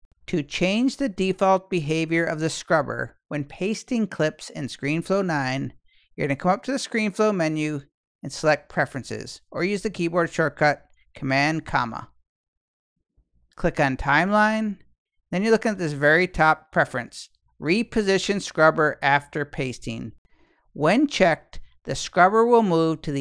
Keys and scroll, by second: 11.5 super+,.